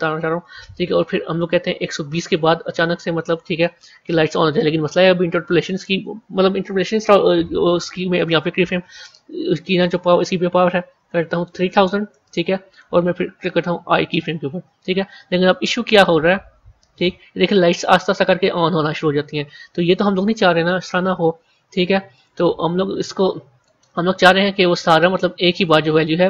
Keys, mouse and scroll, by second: 2.0-4.7 drag, 9.6-11.3 drag, 11.3 KP_0, 11.5 KP_0, 15.7-18.8 drag, 22.2 click, 24.8-26.2 drag.